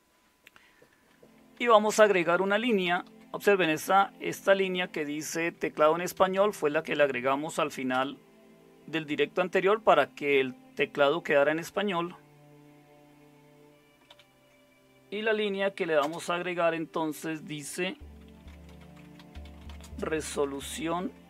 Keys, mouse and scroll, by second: 1.5 Down, 1.7 Down, 1.9 Down, 2.0 Down, 2.2-3.1 Down, 3.6 Up, 5.9-8.4 typing, 14.1 #, 16.0 typing, 18.1-21.2 typing.